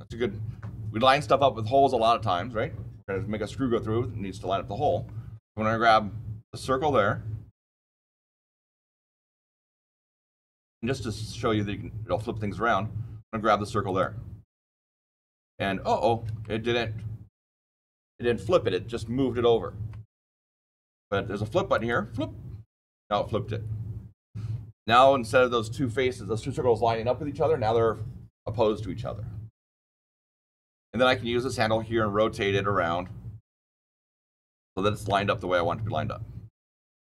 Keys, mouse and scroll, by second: 8.3 click, 9.0 scroll down 4, 9.8-10.7 scroll up 4, 10.8-12.1 shift+middle click, 11.2 shift+middle click, 13.8 click, 15.4-16.1 typing, 16.3-17.2 shift+middle click, 16.7 shift+middle click, 16.7 shift+middle click, 21.7 click, 24.8 click, 31.3 click, 35.5-36.7 shift+middle drag, 36.7 shift+click.